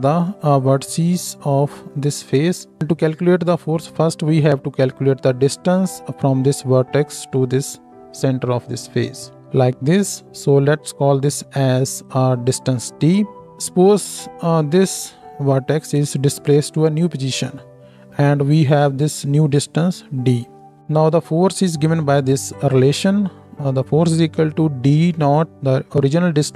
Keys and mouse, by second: 10.8-13.4 drag, 13.4-26.5 shift+middle drag.